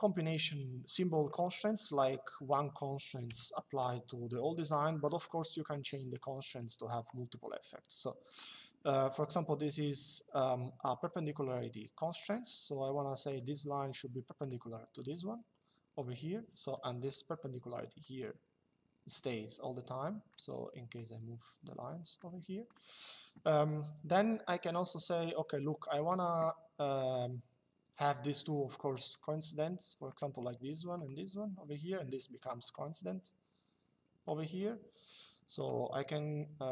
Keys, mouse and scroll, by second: 1.0 click, 2.2 Escape, 3.0 l, 4.7 Escape, 8.7 click, 13.0 click, 14.1 click, 16.7 Escape, 20.7 click, 22.4 click, 28.8 click, 31.9 Escape, 32.4 click, 35.3 click.